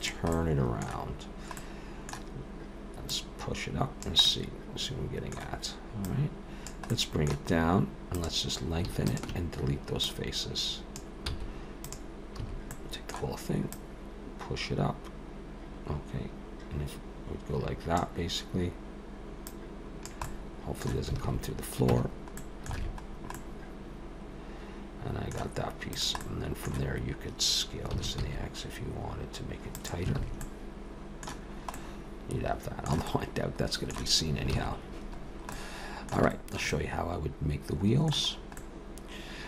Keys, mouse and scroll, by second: 0.3 middle click, 1.6 middle click, 3.1 click, 4.2 middle click, 6.1 click, 6.9 middle click, 7.5-8.2 scroll up 1, 8.2 click, 8.2-8.9 scroll up 1, 9.1 shift+click, 10.0 click, 11.3 x, 12.4 a, 12.7 middle click, 13.7 click, 19.5 click, 20.3 middle click, 21.2 alt+a, 21.9 Tab, 22.4 middle click, 22.8 alt+a, 23.1-24.0 scroll down 3, 23.4 middle click, 25.9 click, 26.2 middle click, 27.9 s, 30.2 alt+a, 30.4 middle click, 31.5-32.5 scroll down 2, 31.7 middle click, 33.1 middle click, 34.6 ctrl+s, 35.3-35.9 scroll down 2, 35.5 middle click, 36.3 shift+middle click, 36.7 middle click, 38.4 scroll up 2, 38.6 middle click.